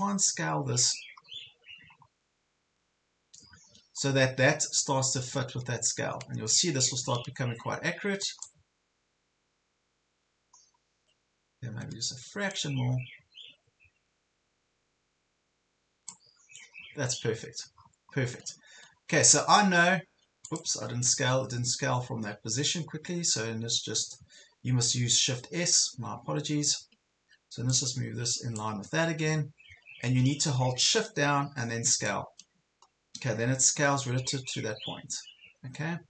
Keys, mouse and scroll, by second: 1.3 scroll up 1, 2.1 scroll down 1, 2.3 ctrl+scroll up 1, 3.0 scroll down 1, 3.5 ctrl+scroll up 1, 4.1 scroll down 1, 6.5-8.6 drag, 9.0-9.5 ctrl+scroll up 2, 12.6-16.4 drag, 16.7 ctrl+scroll up 1, 17.3 ctrl+scroll up 1, 17.7 ctrl+scroll down 1, 18.7 ctrl+scroll up 1, 20.5 click, 23.9 scroll up 1, 24.4 ctrl+scroll down 1, 25.7 click, 27.1 ctrl+scroll up 1, 27.7 click, 28.9 ctrl+scroll down 1, 32.1-36.0 shift+drag.